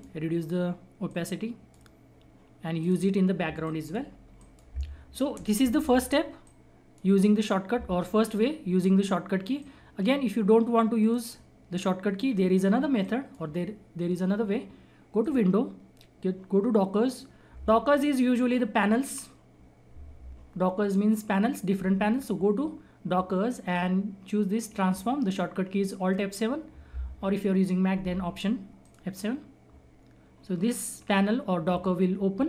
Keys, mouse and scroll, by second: 0.0-7.3 drag, 7.3-8.3 scroll up 1, 8.3-9.6 scroll down 1, 9.6-11.0 drag, 11.0 right click, 11.7-12.3 scroll up 1, 12.3-13.0 scroll down 1, 13.0 click, 28.8 click.